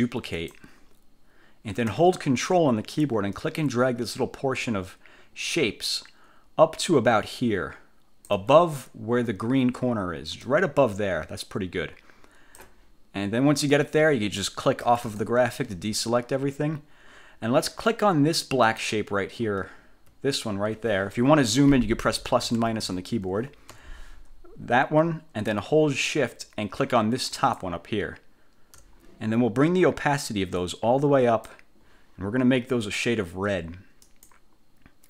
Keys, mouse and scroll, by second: 0.5 click, 3.5-8.6 ctrl+drag, 10.6-12.9 ctrl+drag, 15.0 click, 18.8 click, 19.9 ctrl+scroll up 2, 21.2 1, 22.2 =, 22.4 -, 22.6 =, 23.8 1, 27.4 shift+click, 30.7 click, 34.2 click.